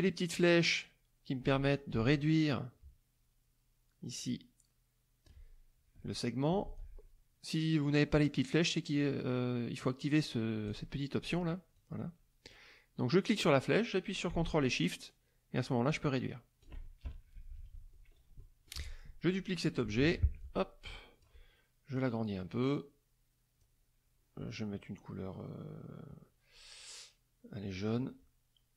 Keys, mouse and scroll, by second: 1.9-5.4 ctrl+drag, 6.6 ctrl+z, 10.6 click, 11.2 click, 11.7 click, 13.1-16.8 drag, 17.3 KP_Subtract, 18.4 middle click, 18.7 F1, 19.9 ctrl+d, 20.3 ctrl+click, 22.0-23.8 drag, 27.9 click.